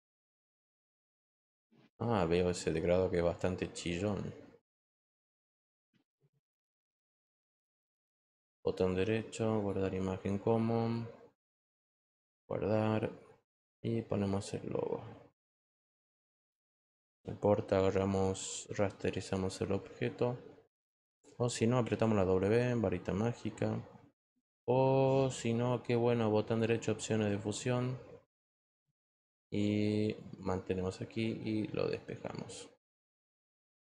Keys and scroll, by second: 17.0 Return, 21.8 w.